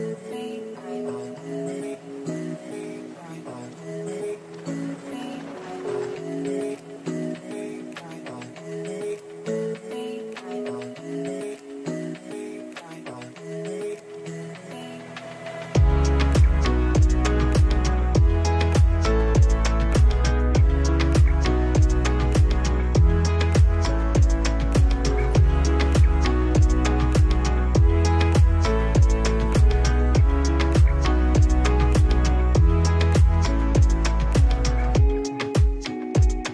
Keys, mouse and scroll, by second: 1.7-3.2 alt+right drag, 3.2-11.0 drag, 11.0-11.4 scroll down 1, 14.2 scroll up 1, 15.8 scroll down 1, 18.6 click, 25.7 ctrl+d, 26.3 scroll down 1, 28.8 scroll up 1, 29.6 click, 32.0 click.